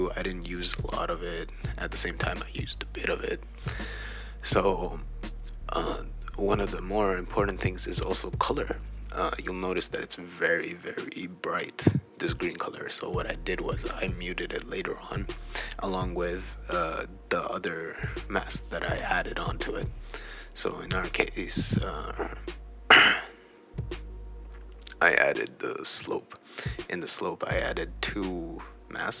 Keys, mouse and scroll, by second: 0.7 click, 1.3 click, 1.9 click, 2.5 click, 3.0-4.2 drag, 4.3-6.3 drag, 7.5-9.8 drag, 10.0 right click, 10.1 w, 11.2 click, 11.5 click, 11.8-20.7 typing, 12.0 shift+right click, 14.5 right click, 15.1 click, 15.7 right click, 16.8-19.8 shift+right drag, 20.2-21.5 shift+right drag, 21.8 click, 22.5 BackSpace, 23.2 right click, 23.3 e, 23.8 shift+w, 25.6 click, 25.8 click, 26.0 click, 26.4 click, 26.9 click, 27.1-28.1 right drag, 27.5 shift+w.